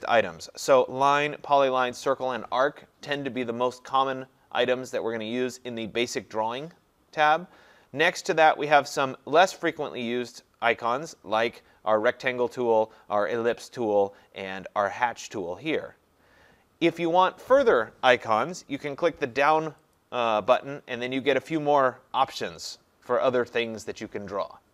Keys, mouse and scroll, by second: 20.0-24.7 drag.